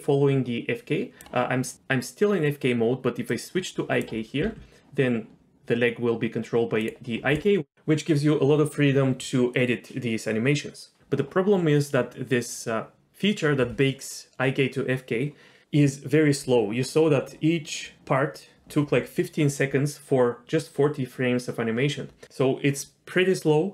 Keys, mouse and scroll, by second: 1.7 click, 3.3 click, 4.4 g.